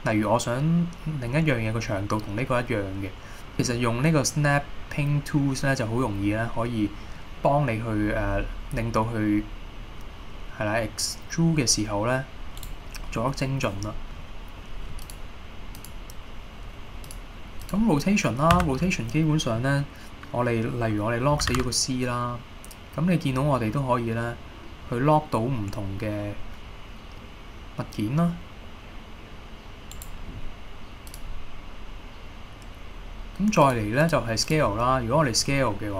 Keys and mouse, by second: 12.7 right click, 13.3 middle click, 15.1 click, 16.0-17.6 drag, 18.1 middle drag, 18.7 a, 21.5 r, 21.6 z, 30.0 right click, 31.3-35.0 drag, 35.7 middle click.